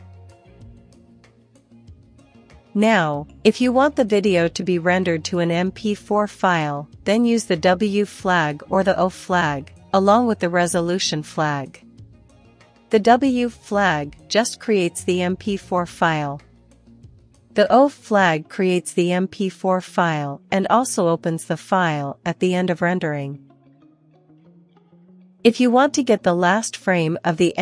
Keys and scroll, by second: 1.6 ctrl+c, 2.8 ctrl+l, 3.4 w, 4.7 l, 7.1 Return, 8.6 1, 9.1 Return, 18.4 ctrl+l, 19.5 Up, 20.7 Left, 20.9 BackSpace, 21.2 o, 22.1 Return, 23.5 1, 23.9 Return.